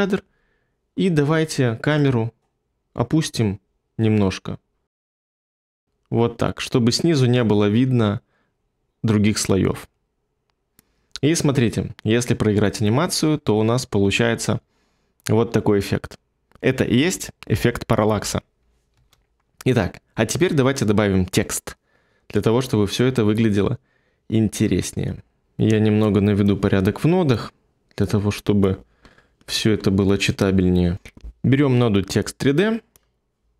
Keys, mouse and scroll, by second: 18.9 space.